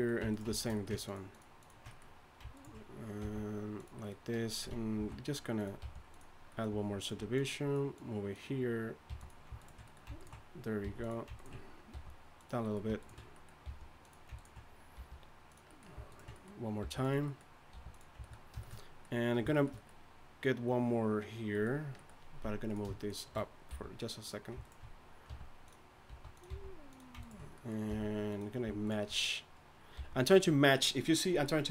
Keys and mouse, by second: 1.1 click, 1.1 right click, 2.3 click, 2.5 right click, 3.2 g, 5.0 ctrl+b, 5.8 g, 7.0-9.8 drag, 7.3-9.0 right drag, 9.1 g, 9.6 right click, 10.8 g, 11.9 g, 13.6 g, 15.0 g, 16.8 g, 17.7 r, 22.7-23.7 drag, 23.7 g, 25.3 r, 26.1 s, 26.5 g, 27.9 click, 27.9 g, 30.0 g.